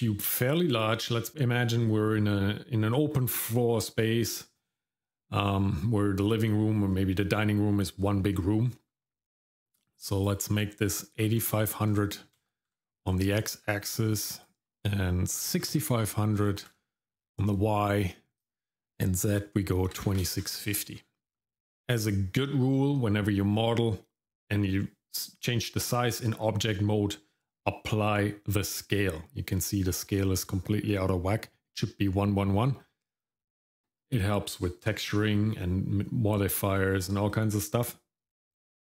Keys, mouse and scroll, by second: 10.2-12.7 drag, 14.4-16.6 drag, 18.4-20.5 drag, 21.2 shift+middle click.